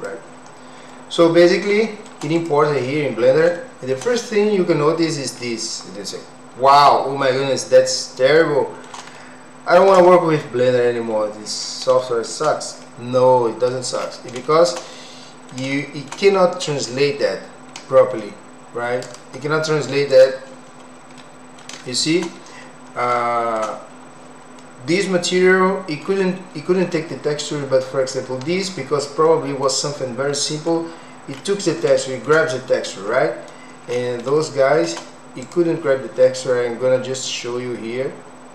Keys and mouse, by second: 0.9 middle click, 1.8 shift+middle click, 2.4 click, 3.5 shift+middle click, 7.2-8.8 middle drag, 9.1 shift+middle click, 10.1-11.6 middle drag, 12.0 shift+middle click, 12.8 middle click, 14.4 shift+middle click, 14.9 middle click, 15.8 shift+middle click, 19.0-20.5 drag, 21.2 middle click, 21.8 shift+middle click, 23.2 shift+middle click, 25.5 middle click, 29.2 middle click, 30.4 middle click, 31.9 shift+middle click, 34.4 shift+middle click, 35.4 click.